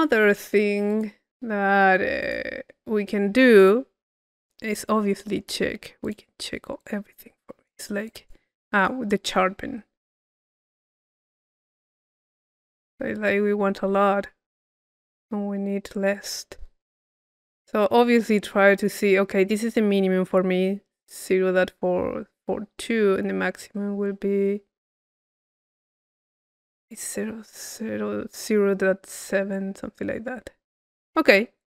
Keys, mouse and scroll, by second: 3.6-5.3 drag, 5.3 middle click, 6.1-10.3 drag, 10.3-31.3 drag, 31.3 middle click, 31.6 click.